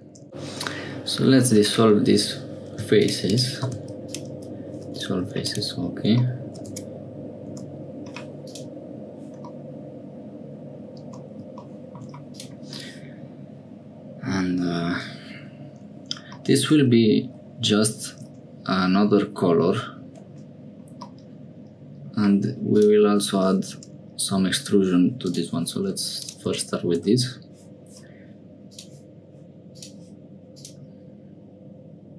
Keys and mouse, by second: 0.2 3, 0.7 click, 3.6 x, 4.9 click, 5.4 click, 6.2 middle click, 6.7 Tab, 7.5 Tab, 8.4 click, 9.6-11.2 middle drag, 12.3 click, 16.4 middle click, 16.9 Tab, 18.2 Tab, 21.1-22.1 middle drag, 22.7 click, 25.2 click, 26.2-27.4 drag, 28.7 click, 29.7 click, 30.5-32.1 drag.